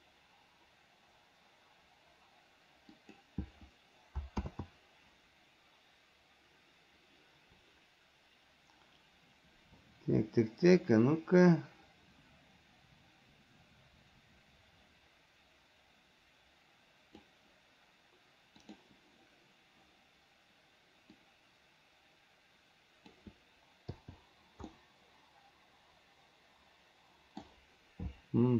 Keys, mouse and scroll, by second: 4.7 ctrl+z, 11.0-17.5 drag, 21.5-23.4 drag, 24.9-27.6 middle drag.